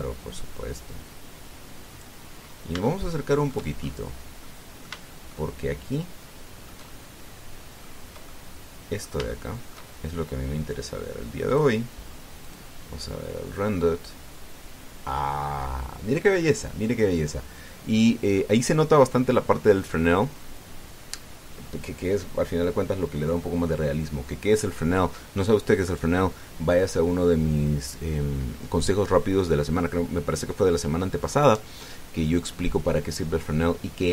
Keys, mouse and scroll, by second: 0.6-3.0 drag, 3.1-3.4 scroll up 2, 3.6 shift+click, 4.6-4.9 shift+scroll up 1, 5.2 click, 6.1-8.8 shift+drag, 9.1-10.7 middle drag, 12.3 click, 13.2 click.